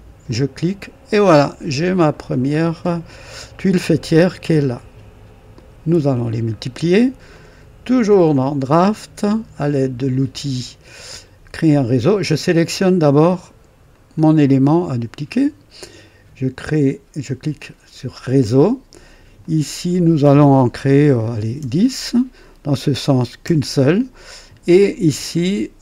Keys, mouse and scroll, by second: 0.2 click, 1.4-2.7 scroll down 2, 7.2 click, 8.4 click, 13.8 click, 17.3 click, 19.3 click, 21.4 KP_1, 21.5 KP_0, 22.2 click, 23.4 KP_1, 23.4 KP_1, 25.2 click.